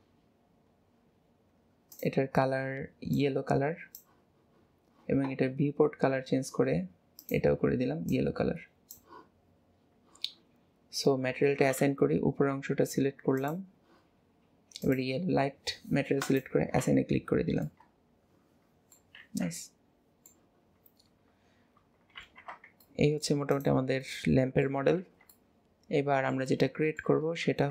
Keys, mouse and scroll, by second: 7.3 click, 13.5 click, 14.9 click, 16.3 click, 17.3-17.7 scroll down 4, 17.7 middle click, 18.1 middle click, 18.5 middle click, 19.3 ctrl+s, 19.6-20.8 middle drag, 20.8-21.9 scroll down 2, 22.3 alt+h, 22.9 middle click, 23.6 click, 24.1-25.1 middle drag, 25.1 ctrl+s, 25.4-27.7 middle drag.